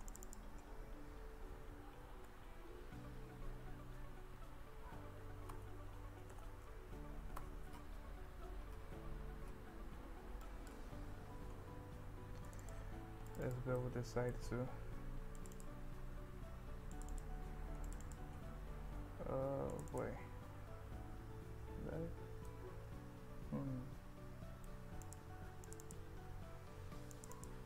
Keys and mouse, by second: 0.3 click, 2.1 ctrl+b, 6.2 g, 6.4 z, 10.4 click, 12.6 click, 13.3 click, 13.5 click, 13.8 middle click, 15.4 click, 17.0 click, 18.1 click, 19.8 click, 19.9 click, 21.2 KP_1, 22.5-24.7 middle drag, 25.0 click, 25.7 click, 25.9 click, 27.4 click.